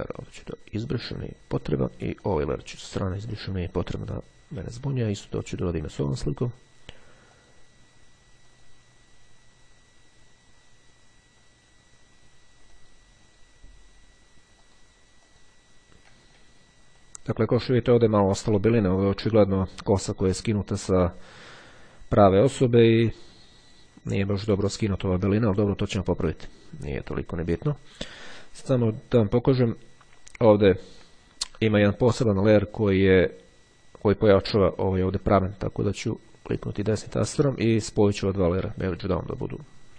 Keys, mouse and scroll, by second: 1.0 click, 2.4 click, 3.1 click, 5.3 click, 7.3 click, 8.6 click, 12.1-13.7 drag, 14.7-16.0 drag, 16.7-17.9 ctrl+scroll up 2, 20.4-21.0 scroll down 2, 21.0-21.5 scroll up 2, 21.9-22.4 scroll down 2, 26.0-26.5 scroll down 2, 26.7-27.3 ctrl+scroll down 2, 28.3-30.0 drag, 32.1-33.6 drag, 34.4 click, 36.7-37.7 drag, 37.1 right click, 38.7 click.